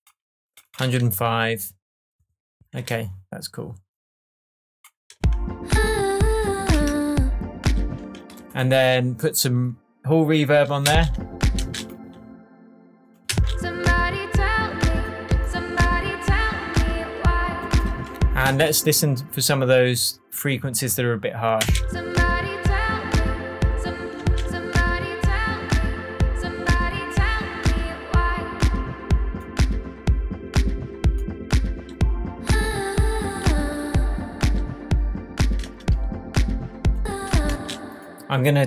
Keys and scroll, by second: 5.1 space, 6.7 BackSpace, 7.9 space, 10.8 space, 13.3 space, 18.4 space, 21.6 space, 23.9 space, 37.4 alt+space, 38.1 space.